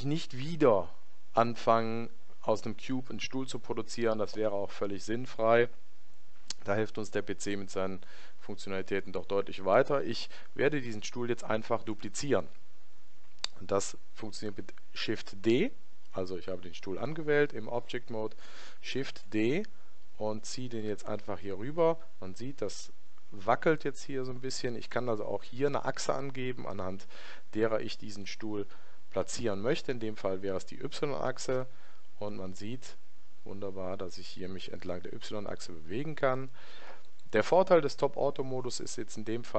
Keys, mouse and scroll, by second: 18.9 shift+d.